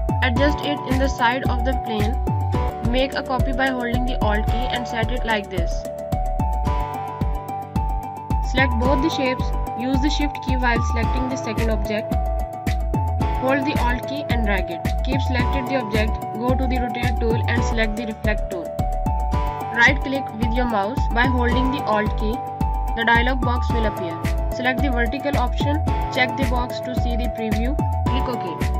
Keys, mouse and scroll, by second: 0.1 ctrl+z, 0.4 click, 3.3 alt+click, 6.0 click, 9.8 click, 12.0 shift+click, 13.6 click, 15.2 z, 21.0 click, 22.9 click, 27.2 click.